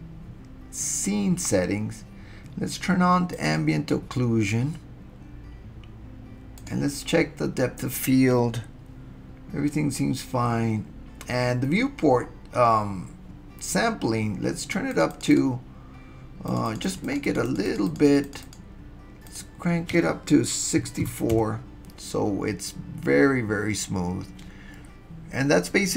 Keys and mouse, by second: 3.4 click, 6.6 click, 14.9 click, 15.1 click, 15.3 click, 16.5 click, 16.7 click, 16.8 click, 17.1 click, 17.3 click, 17.5 click, 17.7 click, 17.9 click, 18.1 click, 18.2 click, 18.4 click, 19.4-22.0 drag.